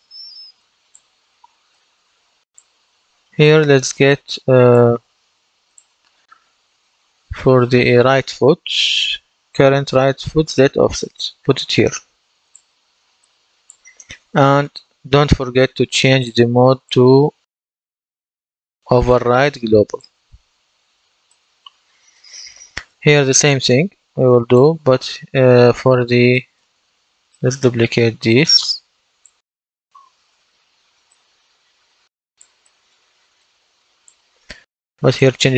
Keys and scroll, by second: 30.0 ctrl+d.